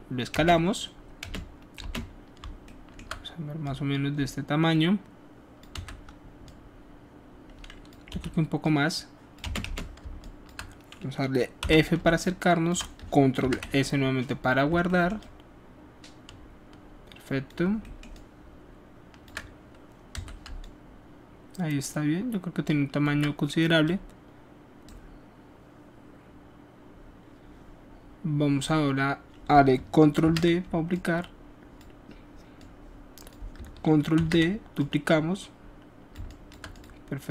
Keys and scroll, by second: 0.3 space, 1.2 space, 1.7 space, 5.7 w, 8.0 r, 9.4 space, 9.6 space, 11.5 f, 12.9 ctrl+alt+f, 13.3 ctrl+alt+s, 20.1 w, 30.2 ctrl+d, 34.1 ctrl+d.